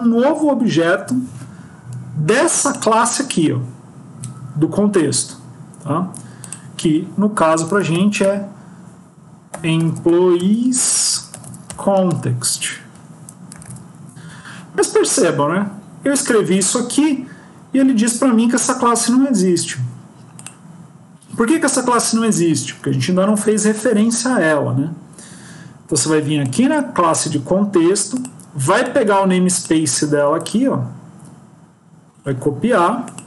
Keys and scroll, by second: 14.1 Down.